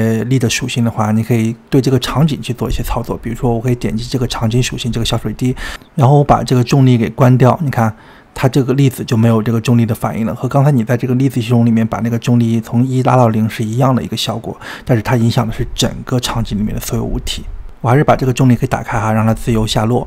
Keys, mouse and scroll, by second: 1.5 click, 3.8 click, 4.3 click, 4.8 click, 5.2 click, 7.0 click, 13.7 space, 17.4 click, 18.8 click, 20.0 click.